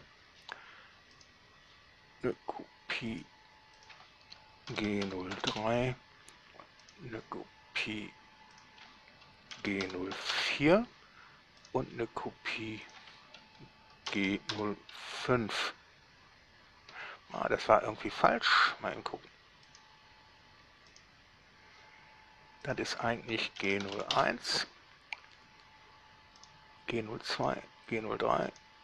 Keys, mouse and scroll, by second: 0.1 Return, 1.4 click, 1.6 right click, 1.6 click, 3.3 drag, 4.0 click, 4.9 shift+g, 5.3 0, 5.6 3, 5.7 Return, 7.1 right click, 8.9 click, 9.7 shift+g, 10.1 0, 10.4 4, 10.6 Return, 11.9 right click, 13.1 click, 14.3 g, 14.7 0, 15.3 5, 17.2 Escape, 18.4 right click, 19.9 right click, 21.2 right click, 22.9 click, 23.9 g, 24.1 0, 24.2 1, 24.4 Return, 26.7 click, 27.6 right click, 28.7 right click.